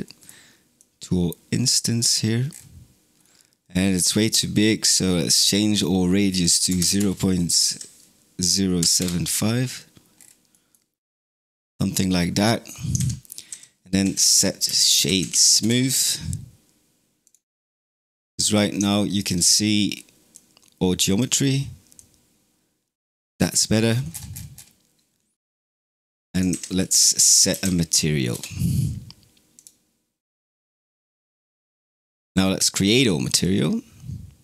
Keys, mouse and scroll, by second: 0.6 click, 2.3 scroll down 6, 3.0-3.6 scroll up 3, 3.6-4.0 middle drag, 4.0-5.6 scroll up 6, 5.6-8.7 drag, 10.0-10.4 scroll down 5, 10.4-12.8 middle drag, 12.8 shift+a, 17.4-18.0 scroll up 14, 18.4 scroll down 2, 18.8-20.2 shift+middle drag, 20.2 click, 21.8 click, 23.3-24.5 scroll down 26, 25.3-26.4 middle drag, 26.4 shift+a, 27.0 s, 30.8 click, 32.6 click, 34.3-34.4 drag.